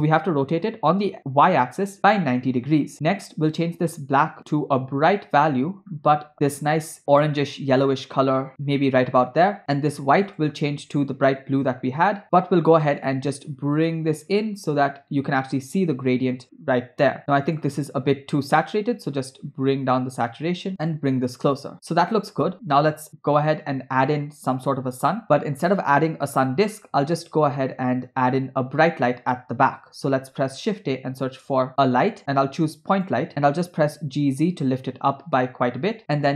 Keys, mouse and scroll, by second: 2.9 middle click, 3.5 click, 9.6 click, 10.3 click, 13.0-17.2 drag, 17.5 click, 20.9 click, 30.3 shift+a, 33.7 g.